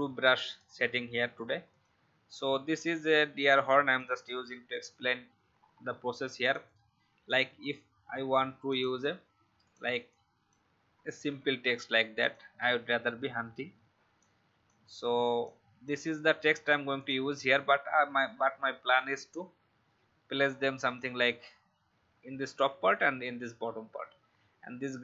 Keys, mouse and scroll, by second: 5.6 alt+scroll up 1, 6.4 click, 11.1 ctrl+c, 12.1 click, 12.6 ctrl+v, 14.1 shift+click, 15.4-16.6 drag.